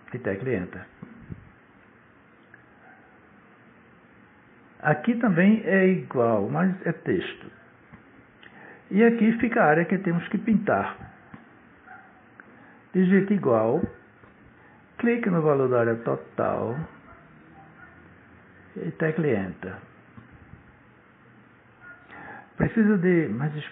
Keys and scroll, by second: 0.2 Return, 13.6 =, 20.4 Return.